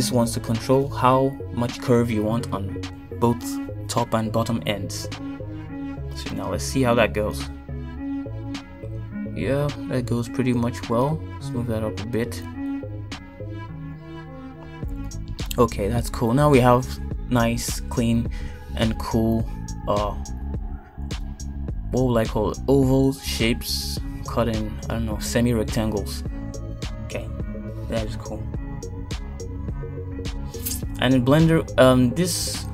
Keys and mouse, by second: 0.3 ctrl+r, 5.9 ctrl+r, 13.0 g, 16.3 shift+middle click, 17.5 shift+middle click, 20.0 Tab, 20.4 Tab, 20.9 Tab, 21.3-22.9 middle drag, 24.7 Tab, 25.7 KP_1, 26.5 shift+middle click, 28.6 shift+middle click.